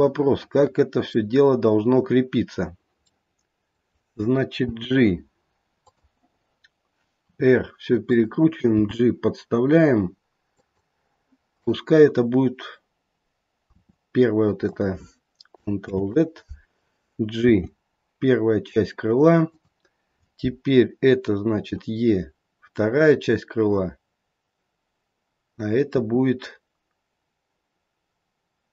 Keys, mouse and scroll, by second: 3.1 middle click, 4.6 g, 7.3 r, 8.8 g, 11.5 click, 13.7 e, 15.8 ctrl+z, 17.4 g, 21.6 e, 25.9 e.